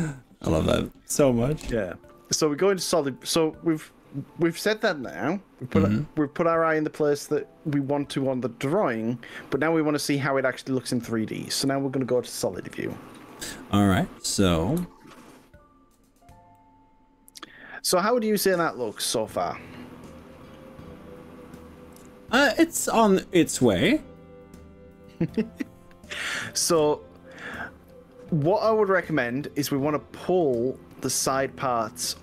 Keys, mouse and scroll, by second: 7.8-11.7 middle drag, 11.7 click, 14.8 z, 16.6-32.2 middle drag.